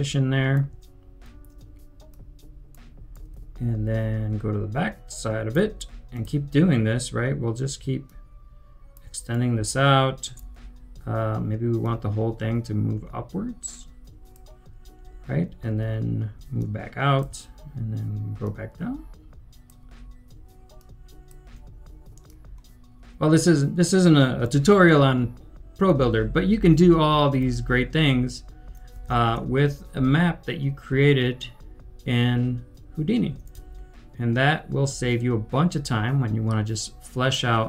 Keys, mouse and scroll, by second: 3.1 right click, 3.4-6.3 typing, 7.7-8.5 typing, 8.0 shift+click, 9.2 right click, 9.2 shift+click, 9.6-10.4 typing, 16.5 shift+click, 20.8 shift+click, 24.5-27.3 typing, 28.3-31.9 typing, 33.1-35.4 typing.